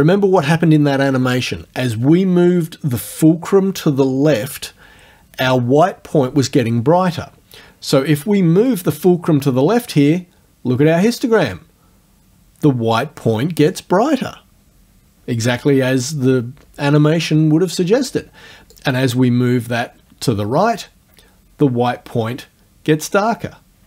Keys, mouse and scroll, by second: 8.7-13.9 drag, 13.9-18.8 scroll up 1, 18.8-23.8 drag.